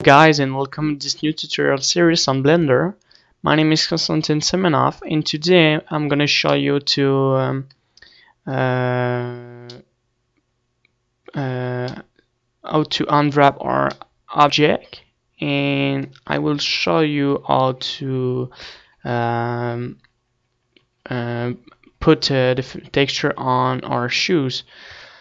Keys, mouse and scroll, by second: 0.1-1.7 middle drag, 7.2-8.3 middle drag, 9.7-11.5 middle drag, 12.0-15.6 middle drag, 16.9-25.0 typing.